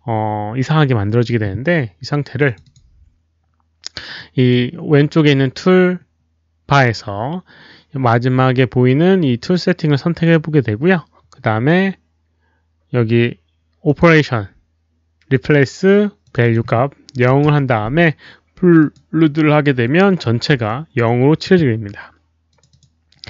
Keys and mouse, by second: 2.4 click, 2.6 click, 4.1 click, 6.2 click, 7.5 click, 13.8 click, 16.2 click, 16.4 click, 17.2 click, 17.2 KP_0, 17.4 Return, 18.7 click, 18.9 Return, 18.9 KP_0, 20.6 alt+click, 22.4 alt+click, 22.6 alt+click.